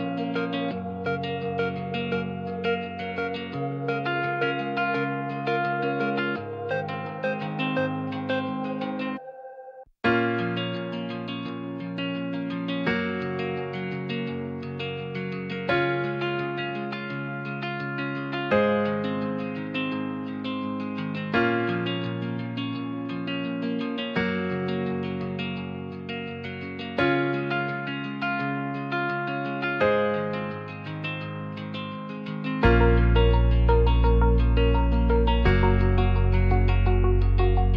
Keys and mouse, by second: 2.8 ctrl+click, 3.4 click, 7.6 click, 18.3 Tab, 19.3 middle click, 20.0 3, 20.2 middle click, 20.7 middle click, 24.2 ctrl+click, 25.5 ctrl+click, 25.9 click, 28.9 Tab, 33.3 click, 34.4 click, 35.2 click.